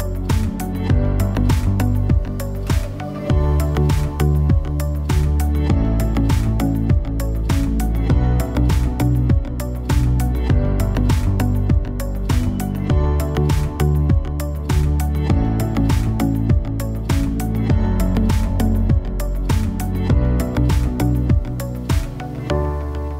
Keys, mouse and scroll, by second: 4.9 middle click, 5.2-6.3 right drag, 6.3 click, 7.2 Tab, 7.6 a, 7.7 a, 8.2 click, 9.1 click, 9.3 middle click, 9.9 Tab, 10.2-10.7 drag, 11.1-11.6 drag, 11.9-13.3 drag, 12.1 Tab, 12.5 a, 12.8 a, 13.3 l, 13.7 click, 15.2 l, 15.4 a, 15.6 l, 15.8 l, 17.1-20.4 typing, 21.4-23.1 typing.